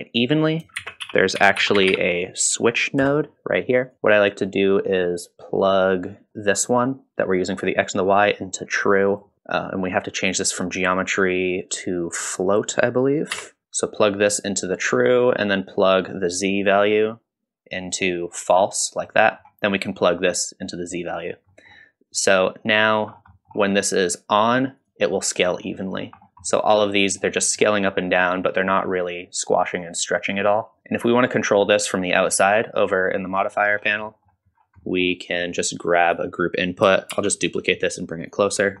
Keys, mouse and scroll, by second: 0.8 shift+a, 4.9 middle click, 4.9-5.6 scroll down 1, 5.7-9.3 drag, 10.7 click, 15.8-18.5 drag, 19.1-19.4 middle drag, 20.0-21.3 drag, 21.5 middle click, 22.2-22.9 drag, 23.1-23.5 scroll up 2, 23.3 middle click, 24.8 click, 25.7-26.0 middle drag, 26.2 scroll up 1, 26.4-26.8 middle drag, 27.1-27.4 scroll down 1, 27.4 middle drag, 28.0-28.4 middle drag, 28.7 middle drag, 30.8 click, 33.4-34.1 scroll down 3, 34.1 middle click, 34.5-34.9 scroll down 2, 34.8 middle click, 35.1 middle click, 36.1 click, 37.1 shift+d, 38.5-38.8 scroll up 4.